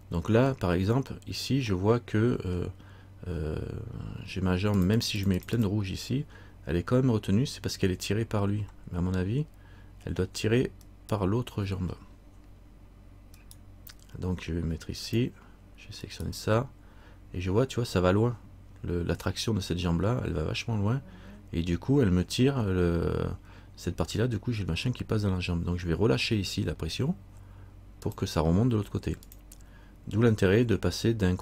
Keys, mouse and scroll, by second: 0.0 middle click, 1.2-1.8 scroll up 2, 1.9 middle click, 4.9-6.1 click, 11.0 right click, 12.1-13.5 scroll down 1, 13.5 right click, 15.2 click, 16.2 right click, 28.2 click.